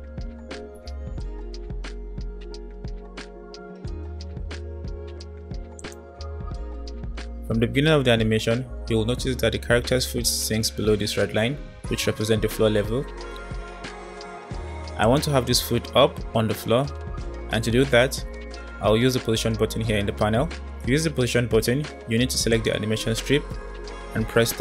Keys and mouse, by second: 3.6 space, 5.8 click, 15.1-16.5 drag, 22.6 click.